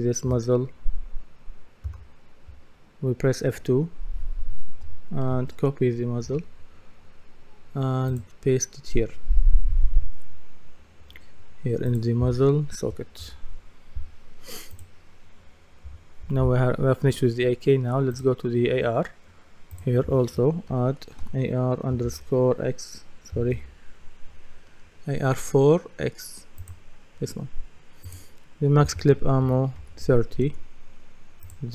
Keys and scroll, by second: 1.8 F2, 20.7-21.2 typing, 23.5 BackSpace, 29.4 KP_3, 30.5 Return.